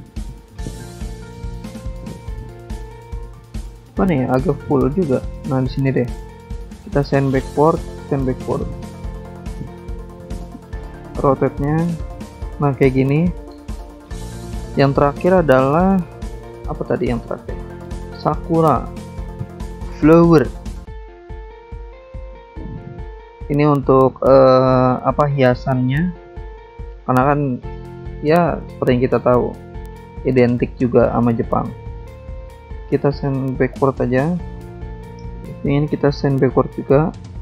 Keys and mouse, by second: 3.6 alt+Tab, 3.7 click, 5.8 click, 5.9 click, 7.3 click, 7.3 click, 8.2 click, 12.8 click, 12.9 click, 13.5 click, 13.7 click, 15.4 click, 16.7 click, 18.0 click, 19.9 click, 20.0 click, 20.5 click, 20.7 click, 21.4 click, 21.5 click, 21.7 alt+Tab, 22.3 alt+Tab, 22.6 alt+Tab, 23.4 alt+Tab, 23.8 alt+Tab, 24.7 click, 25.1 alt+Tab, 26.8 shift+click, 28.3 click, 29.5 shift+click, 30.6 click, 32.0 click, 32.0 click, 33.2 shift+click, 34.4 click, 35.7 ctrl+click, 36.9 shift+click.